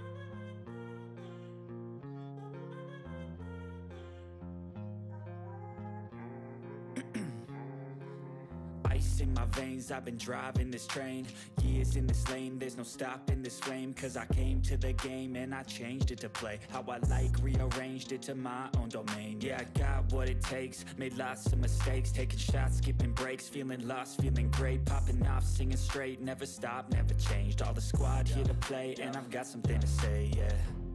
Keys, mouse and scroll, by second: 0.9 click, 1.0 6, 2.1 click, 2.7 3, 3.1 ctrl+s, 3.9 click, 5.8 click, 9.4-10.5 typing, 10.9 click, 12.7-15.4 typing, 17.7-23.8 typing, 25.5 8, 25.8 ctrl+s, 26.8 click, 28.6 click, 29.0-30.9 typing, 30.7 click.